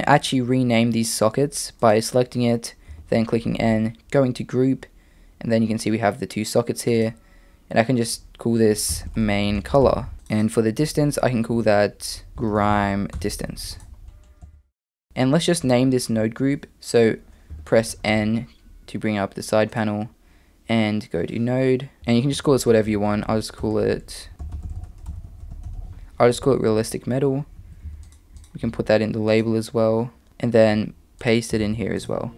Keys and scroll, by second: 2.9 n, 10.1 BackSpace, 14.4 Tab, 15.1 x, 17.5 n, 17.9 n, 23.7 BackSpace, 23.8 BackSpace, 30.3 super+z.